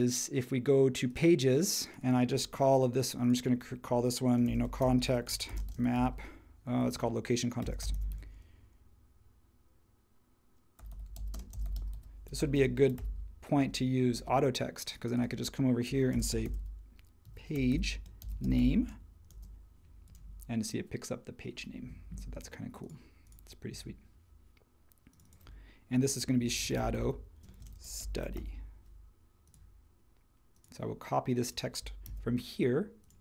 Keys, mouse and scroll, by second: 4.2-8.6 typing, 6.8 super+a, 10.5-13.4 typing, 13.6 Return, 16.1-19.3 typing, 26.1-28.8 typing, 32.0 super+c.